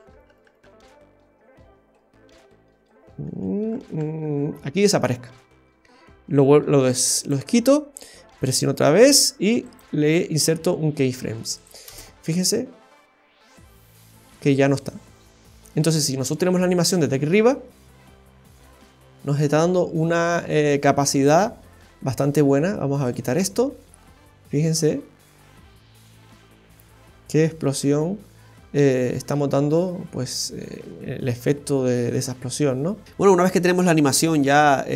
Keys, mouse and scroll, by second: 0.7 Right, 0.8 Right, 2.0-3.2 Left, 3.4 Left, 3.5 Left, 3.7-4.3 Right, 7.2 click, 8.4 right click, 11.6 click, 11.9 space, 16.4-17.0 scroll up 2, 16.9 middle click, 18.4-18.9 scroll down 3, 23.0 click, 23.8 middle click, 33.0 space.